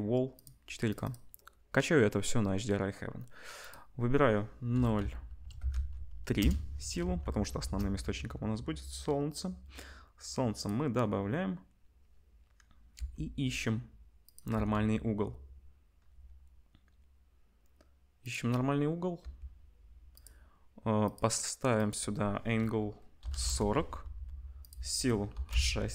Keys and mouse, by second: 1.1-3.6 middle drag, 3.6-14.3 drag, 7.1 ctrl+s, 7.5 shift+a, 12.9 r, 14.3-21.0 middle drag, 14.5 r, 19.2 r, 21.0 click, 21.2 middle click, 21.8-25.9 drag.